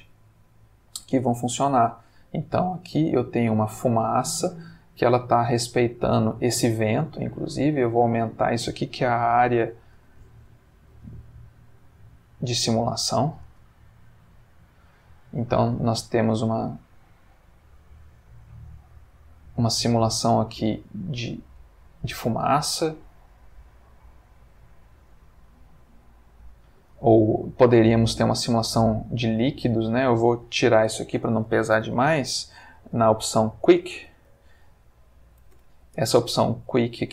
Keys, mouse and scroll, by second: 0.3-1.4 drag, 1.6-3.4 middle drag, 4.0-4.7 middle drag, 4.9 Escape, 6.7 click, 7.5 s, 10.1 shift+z, 11.6 click, 11.9 g, 13.2 click, 13.6 space, 15.1-16.3 middle drag, 17.7-19.2 middle drag, 21.6-22.6 drag, 26.3 Escape, 28.4 x, 28.7 click, 29.5 click, 32.5 F3, 33.7-34.8 typing, 35.0 Down, 35.5 Return.